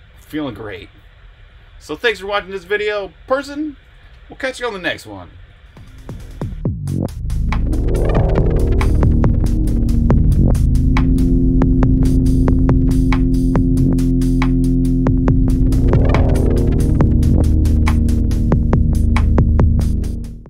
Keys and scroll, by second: 2.5 super+s.